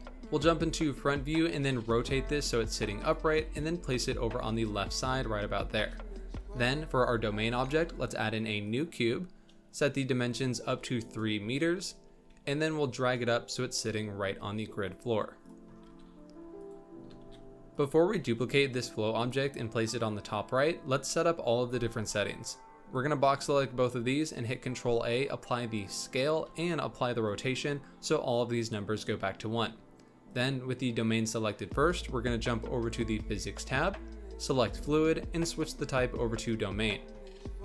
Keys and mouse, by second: 0.2 KP_1, 1.4 shift+middle drag, 1.7 r, 3.4 g, 5.7 shift+a, 10.2 click, 11.7 z, 12.3 g, 15.8 g, 17.0 g, 18.0 g, 22.4-22.9 drag, 23.4 ctrl+a, 30.3 click, 34.6 click, 35.4-36.7 drag.